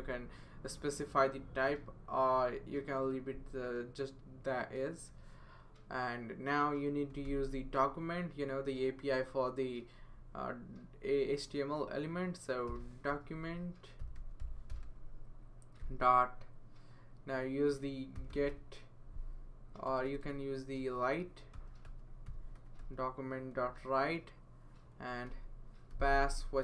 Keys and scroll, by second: 6.8-7.7 typing, 12.7-16.3 typing, 17.9-23.3 typing, 25.3 typing.